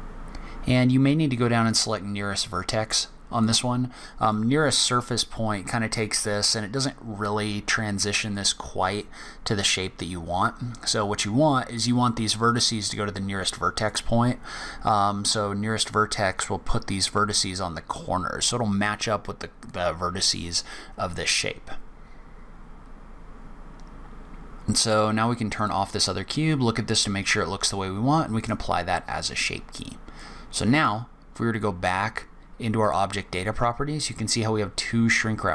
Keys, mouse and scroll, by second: 3.4 click, 8.3 click, 12.4 click, 13.7 click, 25.5 click, 28.3 click, 30.1 click, 32.8 click.